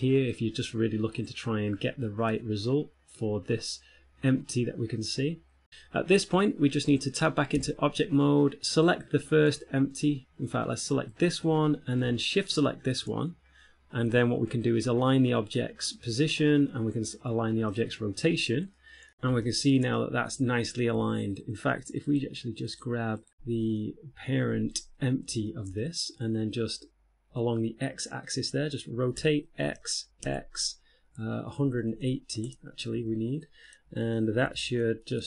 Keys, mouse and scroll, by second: 7.9 Tab, 9.2 right click, 9.8 middle click, 11.5 right click, 12.8 shift+right click, 13.9-14.5 scroll down 2, 14.5 scroll down 8, 16.5 click, 19.0 click, 19.0 middle click, 19.7 shift+middle click, 20.2 middle click, 21.1 z, 22.3 right click, 23.1 right click, 23.4 right click, 23.9 ], 23.9 [, 25.7 shift+middle click, 26.1 middle click, 26.8-27.3 scroll down 1, 29.4 r, 33.2 z, 33.9 middle click, 34.7 alt+z.